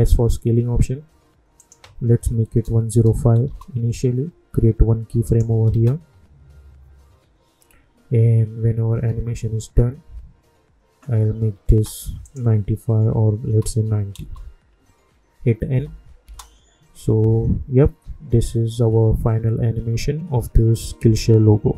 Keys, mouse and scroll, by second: 1.6 click, 3.4 Return, 5.2 click, 5.7 space, 11.7 space, 12.2 click, 14.1 Return, 15.7 n, 16.2 space.